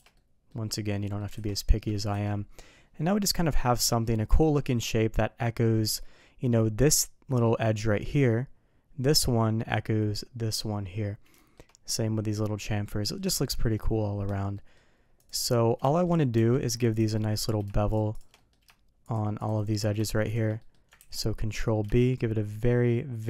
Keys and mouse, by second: 0.1-0.4 middle drag, 1.0 middle click, 1.3 alt+a, 2.1 KP_3, 11.3 shift+middle drag, 14.5 middle drag, 15.1 click, 15.8 shift+middle drag, 16.3 Tab, 17.1 middle drag, 18.1 shift+click, 18.3 middle drag, 19.0 shift+click, 19.3 shift+click, 20.5 middle click, 20.9 ctrl+b.